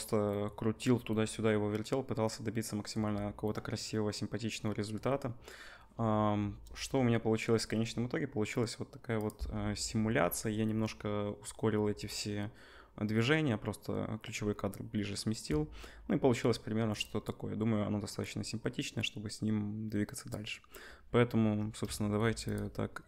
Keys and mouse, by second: 6.3 KP_0, 9.8 space, 15.5 space, 22.5-23.0 middle drag.